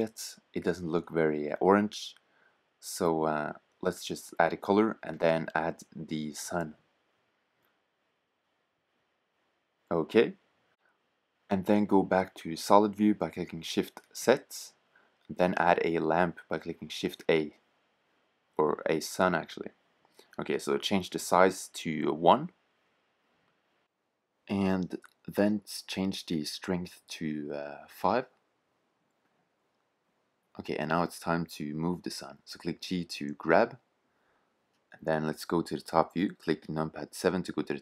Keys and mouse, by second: 11.9 shift+z, 12.3 click, 12.5 click, 13.1 shift+a, 20.9-22.8 drag, 25.1-27.1 drag, 30.8-31.6 middle drag, 32.0 g, 33.6 middle click, 33.7 click, 36.5 KP_7.